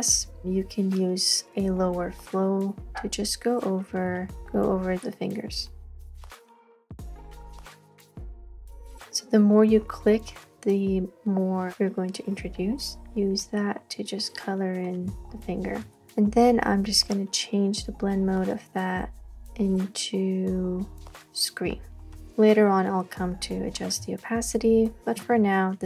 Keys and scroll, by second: 0.4 [, 4.1 super+z, 6.4 super+z, 6.5 super+z, 6.6 super+z, 15.2 space, 15.7 space, 24.8 space.